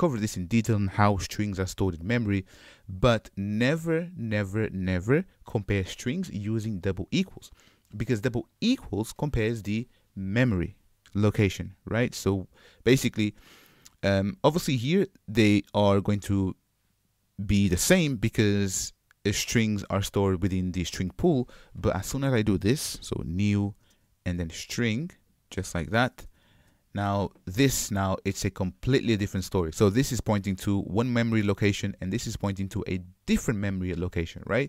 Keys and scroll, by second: 25.4 Return, 26.7 Return.